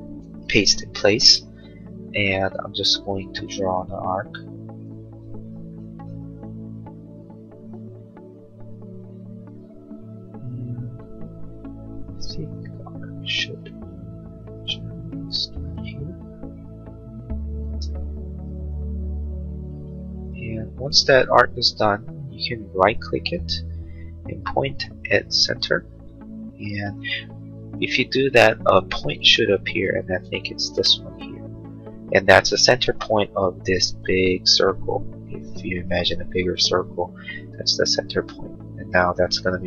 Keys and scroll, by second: 2.5 a, 19.7 space.